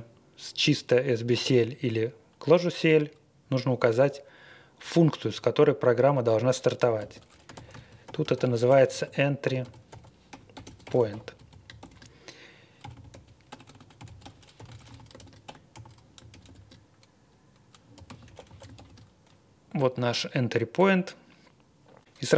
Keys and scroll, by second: 6.7-19.2 typing.